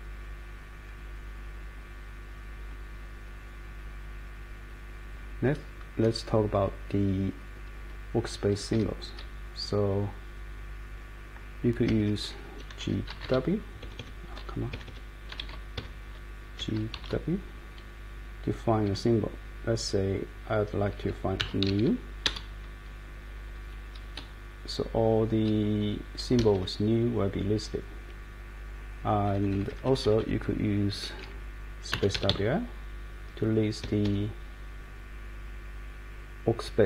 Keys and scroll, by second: 0.7 Up, 8.5 Up, 8.7 Up, 9.2 Down, 9.7 Down, 9.8 Down, 9.8 Down, 9.9 Down, 10.0 Down, 10.1 Down, 10.2 Down, 10.3 Down, 10.3 Down, 10.4 Down, 10.5 Down, 10.6 Down, 10.8 Down, 10.9 Down, 11.9 Escape, 12.0 Escape, 12.5-13.7 typing, 13.8 Escape, 14.0 Escape, 14.7 Escape, 14.9 Escape, 15.4-17.4 typing, 18.8 a, 21.2-22.2 typing, 22.3 Return, 24.2-25.0 Down, 25.4 Up, 25.6 Up, 25.8 Up, 26.4 Escape, 26.5 Escape, 29.0 Up, 29.5 Up, 30.2-32.2 Up, 31.9-32.8 typing, 33.8 Escape.